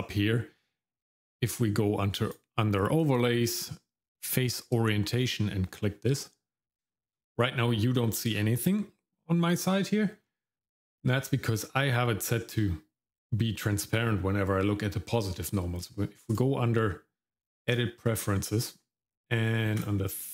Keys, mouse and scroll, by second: 2.2-5.7 drag, 6.9 shift+middle click, 8.1 shift+middle click, 16.3-17.8 drag.